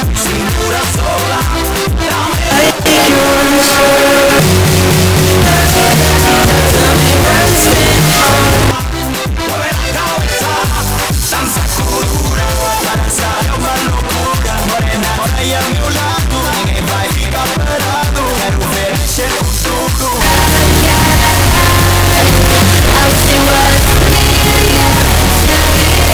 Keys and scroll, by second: 9.3 Page_Down.